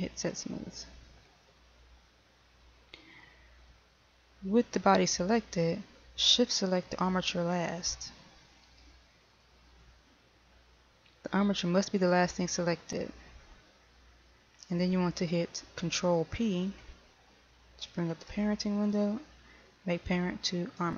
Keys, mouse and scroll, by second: 0.9 click, 9.5 shift+right click, 19.0 ctrl+p.